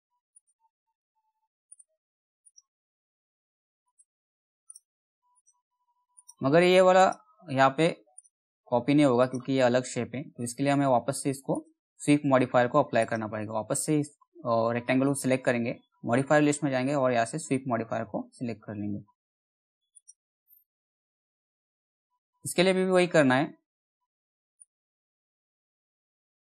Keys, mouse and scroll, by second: 1.2 right click, 2.0 click, 2.0 click, 4.2 right click, 4.9 click, 7.7 right click, 8.7 click, 9.9 middle click, 11.1 click, 16.2 s, 19.5 click, 24.1 click, 24.1-26.5 drag.